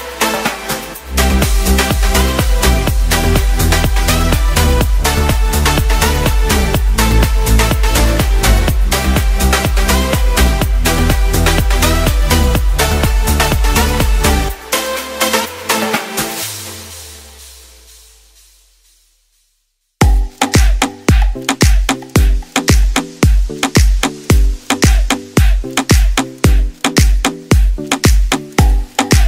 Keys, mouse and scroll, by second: 1.7 shift+d, 4.5 p, 9.1 Tab, 11.0 click, 12.3 click, 12.5 click, 16.9 middle click, 18.0 middle click, 19.7 middle click, 22.0 click, 22.9 click, 23.4 click, 23.8 click, 24.2 click, 24.6 click, 25.0 click, 26.3 click, 26.9 click, 28.3 click, 29.0 click.